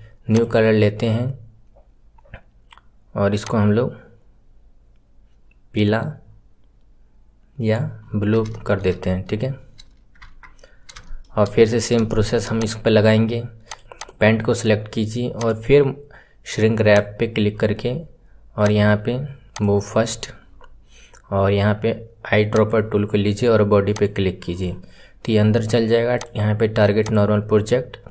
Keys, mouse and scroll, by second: 8.0-8.4 scroll down 2, 8.4-9.5 shift+middle drag, 9.5 scroll up 5, 10.7-11.0 scroll up 3, 11.0-11.7 shift+middle drag, 11.7-12.0 scroll down 2, 12.0 shift+middle click, 12.5 click, 13.6 click, 13.7 scroll up 2, 13.9 click, 15.3-17.4 drag, 17.4 scroll down 1, 18.5-20.0 drag, 20.0-20.5 scroll up 11, 22.4 click, 26.1-28.1 drag.